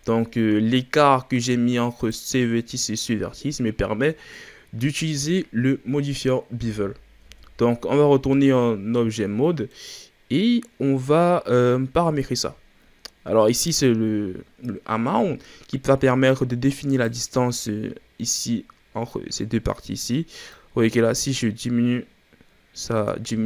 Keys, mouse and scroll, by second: 0.2-1.9 shift+scroll up 3, 1.9 right click, 2.7 right click, 3.3-3.7 scroll down 3, 3.7-4.2 shift+scroll up 6, 4.2-6.6 middle drag, 6.6 KP_1, 7.2 Tab, 9.1 scroll down 3, 9.4 middle click, 9.8-10.5 scroll up 2, 13.6-15.3 drag, 20.4-23.4 shift+drag.